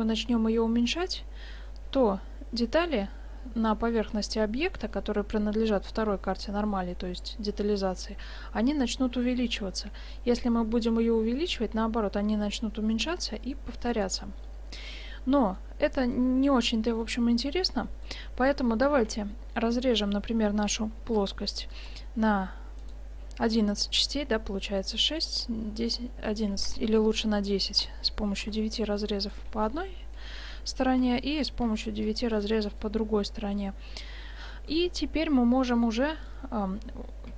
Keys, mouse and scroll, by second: 15.1-19.6 middle drag, 19.0 ctrl+r, 26.6 ctrl+z, 27.8 ctrl+r, 29.8 click, 31.0 ctrl+r, 31.4 click, 32.9-34.0 middle drag.